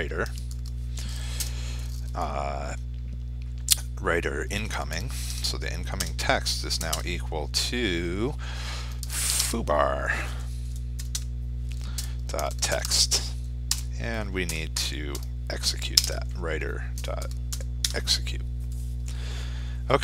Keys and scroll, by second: 8.9 ctrl+space, 15.5 ctrl+space.